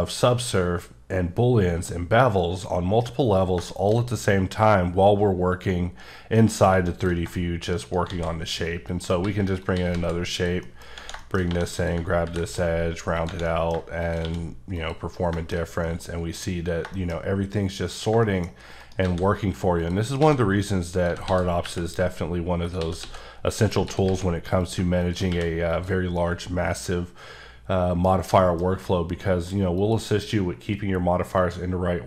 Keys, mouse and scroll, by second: 0.7 scroll up 3, 2.2 scroll down 1, 3.7 shift+middle click, 6.0 scroll down 1, 6.4 middle click, 7.8 shift+right click, 8.1 shift+a, 8.9 click, 9.2 s, 9.6 click, 9.7 s, 9.9 z, 10.3 click, 10.6 middle click, 11.2 shift+middle click, 11.4 scroll up 1, 11.8 click, 12.3 ctrl+b, 12.6 scroll up 1, 13.1 scroll up 5, 13.2 click, 13.4 middle click, 14.0 shift+click, 14.2 shift+q, 14.7 click, 15.3 shift+middle click, 15.6 scroll, 15.8 middle click, 18.2 shift+double middle click, 18.5 shift+scroll up 1, 18.8 shift+right click, 19.0 shift+a, 19.8 click, 20.2 s, 21.0 click, 21.1 s, 21.3 x, 21.6 y, 22.6 click, 22.8 s, 23.0 x, 23.7 click, 23.8 s, 24.1 z, 24.6 click, 25.3 q, 25.7 click, 26.2 middle click, 29.8 click.